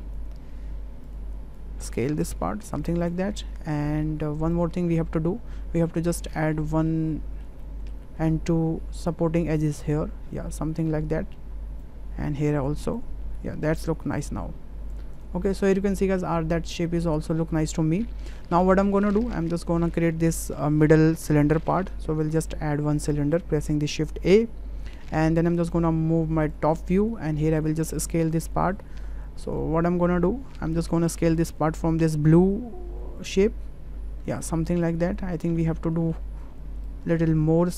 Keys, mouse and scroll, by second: 0.3 s, 1.5 click, 2.2 s, 3.0 click, 3.2 Tab, 4.5 click, 4.9 middle drag, 5.2 drag, 7.0-7.4 ctrl+middle drag, 7.6 middle click, 8.0 Tab, 9.0 click, 9.6-11.8 drag, 13.0-14.3 drag, 15.3 Tab, 16.0 middle click, 16.7-18.3 middle drag, 22.3 shift+a, 29.5 drag, 31.4-34.3 drag, 34.7-35.4 ctrl+middle drag, 35.9-36.2 shift+middle drag, 36.8-37.7 drag.